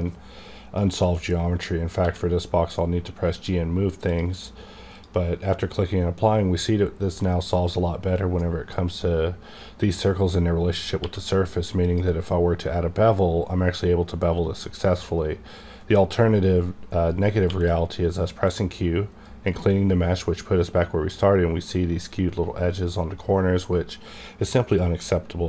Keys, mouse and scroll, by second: 2.0 g, 4.9 click, 11.0 click, 11.0 q, 11.8 click, 13.6-14.8 scroll up 1, 14.9 click, 14.9 scroll up 1, 17.4 q, 17.5 click, 19.2 click.